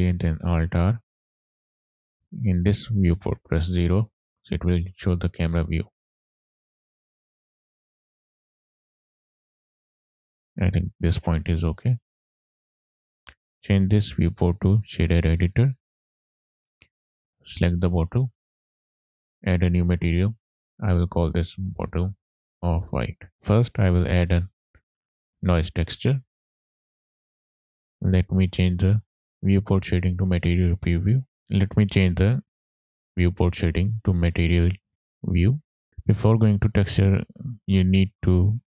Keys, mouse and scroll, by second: 0.0 alt+r, 0.7-1.0 scroll down 2, 1.0-1.6 middle drag, 2.1 click, 3.6 KP_0, 4.6-4.9 scroll down 2, 4.9 middle click, 6.0 click, 6.5 click, 6.6 click, 7.8 scroll up 2, 8.0 shift+middle click, 8.5 click, 8.5 scroll up 1, 8.8 click, 9.0 click, 9.7 click, 11.7-12.4 scroll up 2, 12.4-13.9 scroll up 1, 13.9-15.5 drag, 16.2 scroll down 1, 17.0 scroll down 1, 17.1 click, 18.4 click, 20.3-22.1 drag, 22.1 t, 22.8 f, 23.7 shift+a, 31.1 click, 31.4 ctrl+z, 35.2 click, 35.9 middle click, 37.3-38.8 drag.